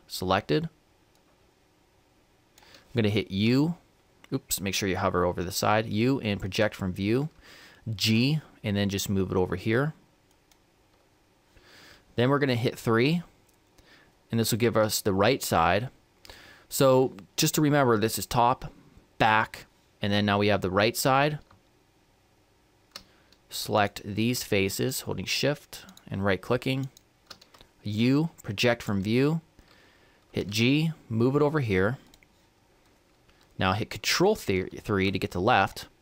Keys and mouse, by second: 1.3-4.3 drag, 4.3 u, 5.5 u, 8.1 g, 13.0 KP_3, 21.7-23.8 middle drag, 23.8-28.6 right drag, 28.0 u, 30.4 g.